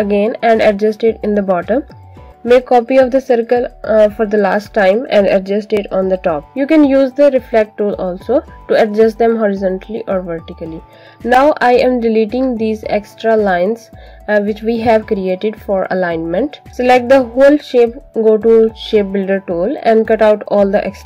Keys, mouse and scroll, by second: 0.1 ctrl+c, 0.4 ctrl+f, 1.2 click, 3.4 f, 4.4 click, 12.0 Delete, 12.9 click, 13.5 Delete, 14.4 click, 14.8 Delete, 15.7 click, 16.0 Delete, 16.4 click, 20.3 alt+click.